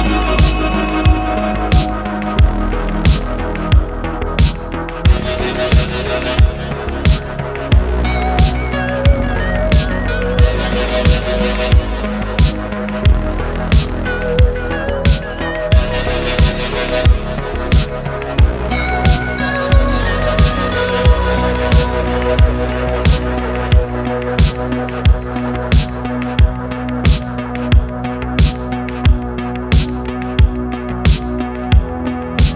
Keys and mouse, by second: 0.4-1.8 drag, 5.4 click, 7.4 ctrl+z, 7.7 ctrl+z, 9.4 middle click, 12.1 Tab, 12.9 a, 14.0-14.9 drag, 16.3 click, 17.5 middle click, 18.5 middle click, 19.1 click, 19.4 middle click, 19.9-20.7 drag, 21.0 e, 21.1 z, 21.7 click, 21.9 e, 22.0 z, 22.9 click, 23.9 click, 24.6 middle click, 25.2 e, 25.3 z, 26.4 click, 26.9 e, 27.0 z, 27.4 click, 27.7 e, 27.8 z, 28.4 click, 28.8 click, 29.4 middle click, 29.9-30.6 drag, 31.1 click.